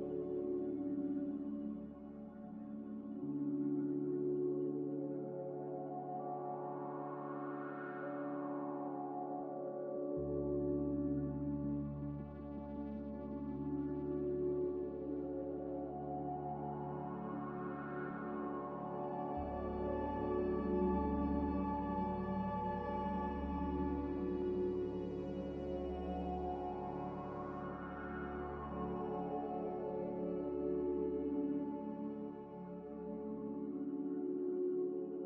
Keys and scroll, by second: 7.8 z, 10.6 Delete, 17.9-22.7 typing, 29.1 1, 30.2 n.